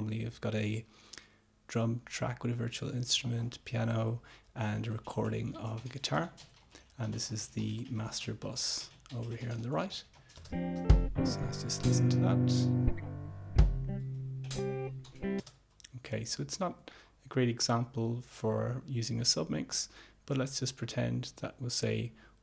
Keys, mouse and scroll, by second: 10.5 space, 15.6 space.